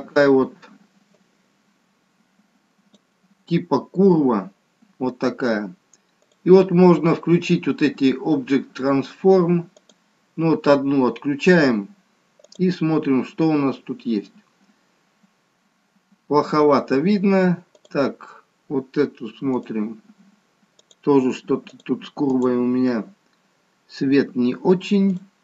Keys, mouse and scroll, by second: 1.2 click, 6.2 click, 9.8 click, 11.8-12.3 scroll up 1, 12.3 scroll up 1, 12.6 click, 14.0-14.8 scroll up 1, 14.8 scroll up 2, 15.0-16.5 scroll down 3, 17.9 click, 23.2-23.9 scroll up 2, 23.9 scroll down 1, 24.1-24.5 scroll down 3, 25.1 click.